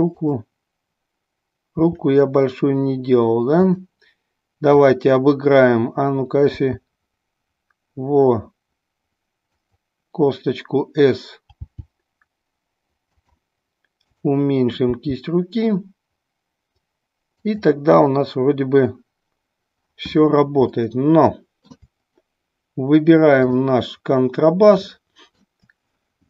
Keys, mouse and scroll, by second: 0.1 click, 1.7 r, 3.7 click, 4.8-6.2 drag, 6.6 s, 9.5 click, 11.6 g, 13.2 click, 14.0 click, 14.8 g, 17.4 click, 20.8-21.8 middle drag, 23.4-24.0 drag, 24.9-25.4 middle drag.